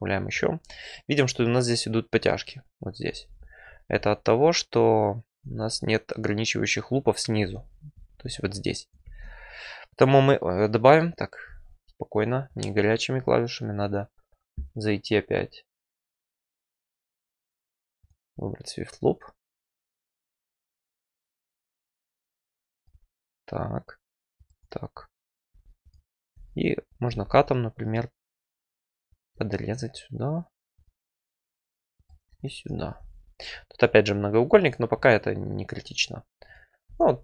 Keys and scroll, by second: 3.0 F4, 7.4 F4, 9.0 ctrl+r, 25.5 1, 27.0 alt+c, 36.8 F4.